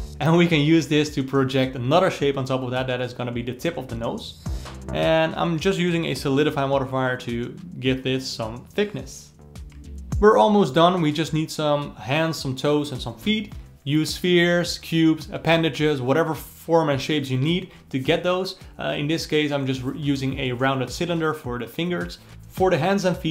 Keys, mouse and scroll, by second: 0.0-2.1 alt+middle drag, 5.0-7.3 drag, 7.3-7.7 alt+middle drag, 7.7-9.3 drag, 9.3 d, 9.7-10.3 ctrl+middle drag, 10.3 s, 12.9 click, 13.6-15.5 alt+middle drag, 15.5 click, 16.0-18.1 alt+middle drag, 18.1-22.1 drag, 22.1 f, 22.3 shift+d.